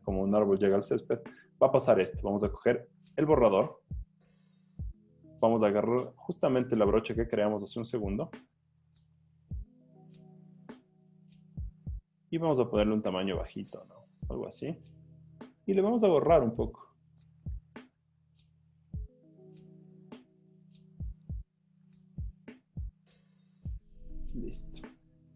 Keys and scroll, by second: 2.6 e, 19.3 super+z, 23.4 z, 24.9 z.